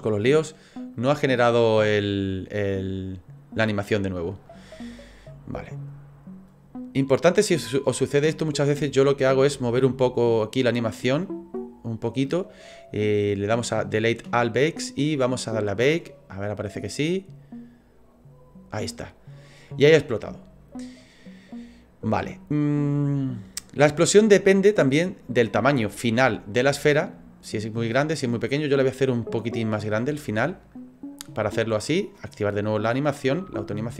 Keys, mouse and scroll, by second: 0.9 click, 3.0 right click, 5.0 click, 6.5 click, 10.2 click, 15.0 click, 16.6 click, 20.3 middle click, 22.9 click, 26.4 click, 27.1 click, 30.3 right click, 31.3 right click, 32.6 click, 33.5 s.